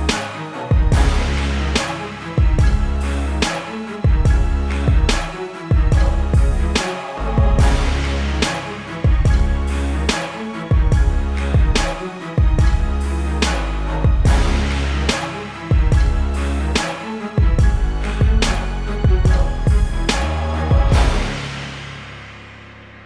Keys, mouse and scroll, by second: 1.5 click, 2.9 click, 3.2 -, 3.6 click, 5.4 ctrl+z, 5.5 click, 22.8 b.